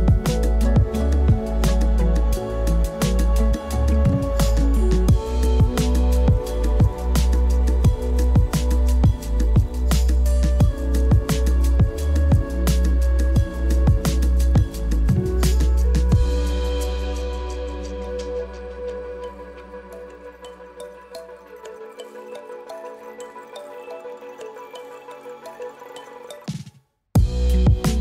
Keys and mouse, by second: 0.1 alt+shift+z, 0.7 alt+shift+z, 1.1 alt+shift+z, 2.3 click, 2.8 click, 5.9 click, 6.9-8.2 drag, 9.8 alt+shift+z, 10.3 ctrl+s, 11.4 click, 12.7 click, 17.1 click, 20.6 z, 22.1 click, 22.9 click, 23.9 click, 24.2 click, 24.8 click, 25.6 click, 26.1 click, 26.9 click.